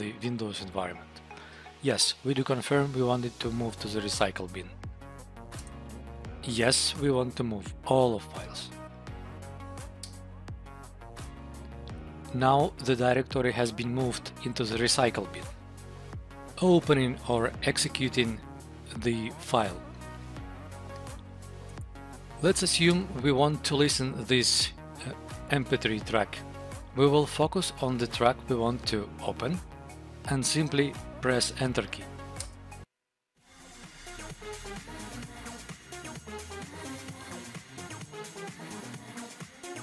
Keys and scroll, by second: 5.5 Return, 6.2 Right, 10.0 Return, 12.4 Up, 12.7 Down, 13.2 Up, 13.7 Down, 15.6 Up, 21.6 Tab, 22.4 Up, 22.8 Return, 23.9 Down, 26.6 Down, 28.1 Up, 32.3 Return.